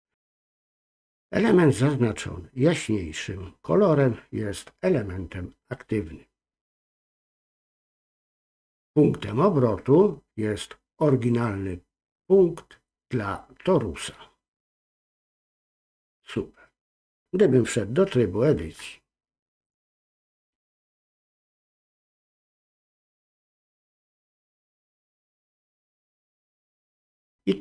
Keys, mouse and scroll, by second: 22.4-26.6 drag.